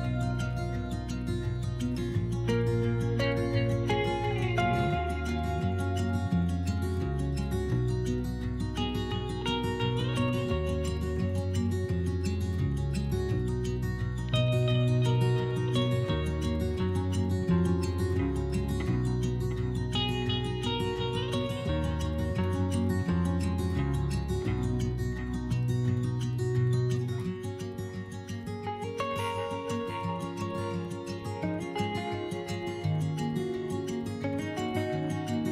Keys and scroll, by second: 4.1 2, 9.1 s, 12.9 b, 13.6 p, 14.5 s, 20.0 1, 25.2 s.